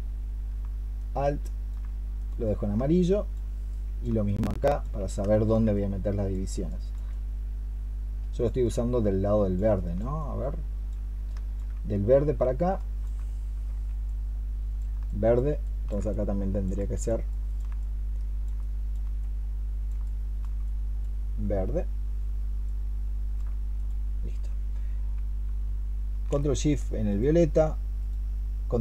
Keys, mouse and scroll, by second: 0.8 alt+click, 2.8 alt+click, 3.5 alt+click, 6.5 alt+click, 9.6 alt+click, 11.1 alt+click, 12.6 alt+click, 14.9 alt+click, 15.5 alt+click, 18.5 alt+click, 19.9 alt+click, 26.9 ctrl+shift+click.